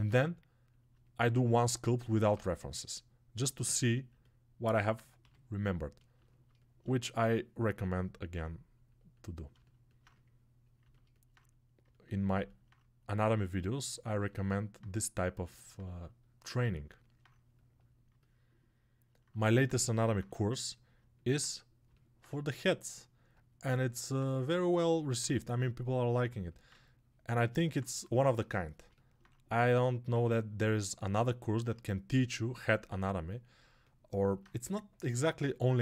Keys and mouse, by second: 7.9-29.2 alt+drag, 29.2 right click, 29.6 alt+click, 29.7 alt+right click, 30.0-35.8 drag.